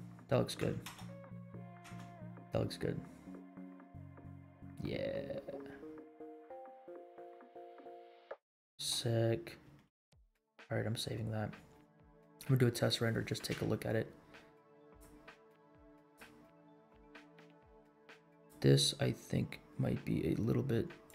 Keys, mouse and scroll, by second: 0.8 space, 1.9 space, 8.8 space, 10.8 ctrl+s, 14.1 scroll down 2, 14.8 click, 16.0 click, 17.3 click, 18.3 click, 21.0 click.